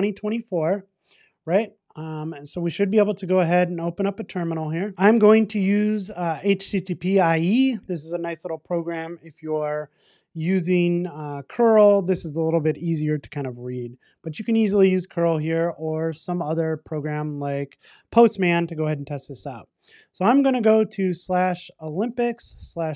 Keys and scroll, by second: 0.2 alt+Return.